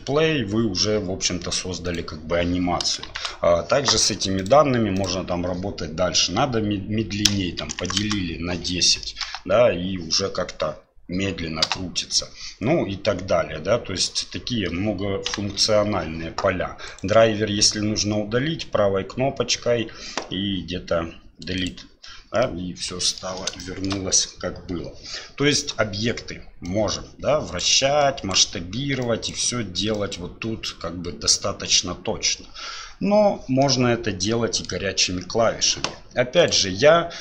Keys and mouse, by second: 1.8 click, 3.0 shift+Left, 4.4-8.5 drag, 8.8 middle drag, 9.2 space, 11.6 space, 15.3 shift+Left, 18.4-21.7 drag, 22.4-23.2 middle drag, 23.6 shift+middle drag, 26.7 click, 28.0 click, 29.1 click, 29.9 click, 33.6-34.7 middle drag, 36.4 click.